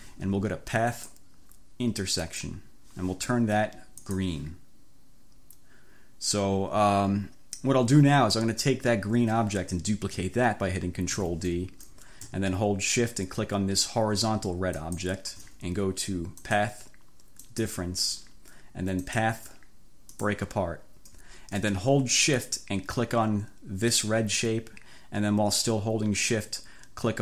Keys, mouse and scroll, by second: 1.0 click, 2.3 click, 4.0 click, 11.2 ctrl+d, 14.8 shift+click, 16.5 click, 17.5 click, 19.2 click, 20.2 click, 24.0 shift+click.